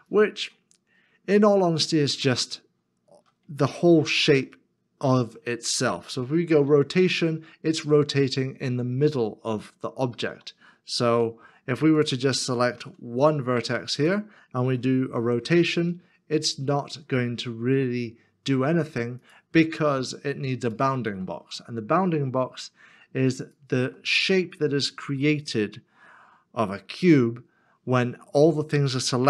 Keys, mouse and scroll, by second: 1.7 middle click, 6.4 r, 11.0 ctrl+z, 20.0 r, 20.7 shift+click, 21.6 middle click, 23.4 shift+click.